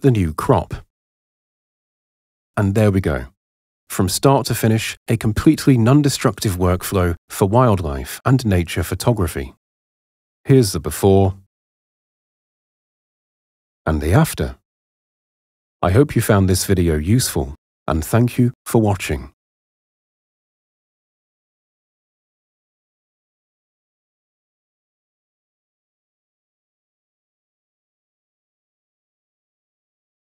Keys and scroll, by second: 1.8 super+0.